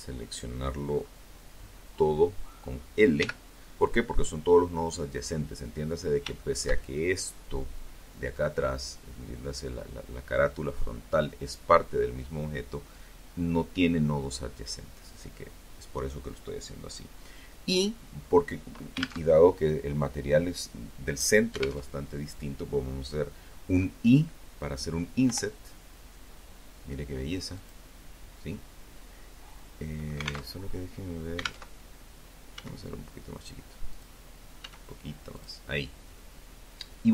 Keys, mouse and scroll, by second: 1.3 l, 4.5-5.7 shift+middle drag, 17.4 alt+Tab, 20.0 alt+Tab, 23.4 i, 25.7 click, 28.7 alt+Tab, 29.9 alt+Tab, 30.7 s, 32.1 click, 32.7 s, 33.5 click, 36.7 click.